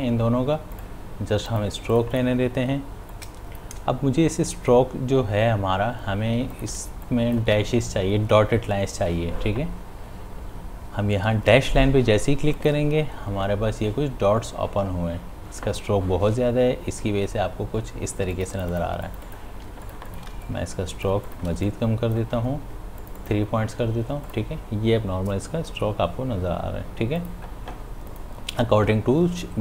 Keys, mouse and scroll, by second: 0.8-6.3 drag, 6.4 space, 6.5 ctrl+click, 7.3 space, 12.5 click, 18.3 click, 19.6 space, 19.8 ctrl+click, 20.3 space, 20.8 click, 21.0 space, 21.4 ctrl+alt+click, 22.0 space, 23.0 click, 27.1 click, 27.2 click.